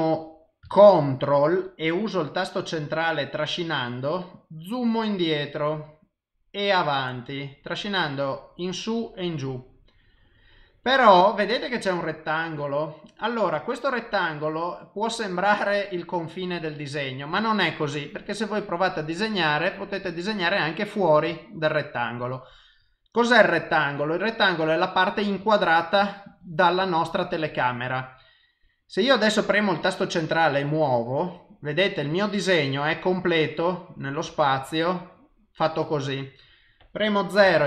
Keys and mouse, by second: 2.6 ctrl+middle click, 26.0 click, 26.4 click, 26.8 click, 30.1 middle click, 36.0 middle click, 37.4 KP_0.